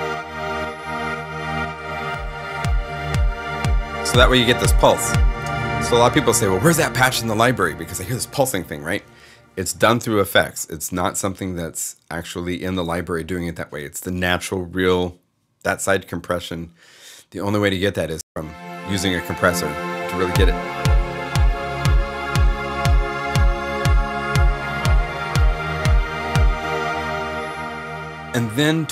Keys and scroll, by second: 5.3 0, 26.3 0.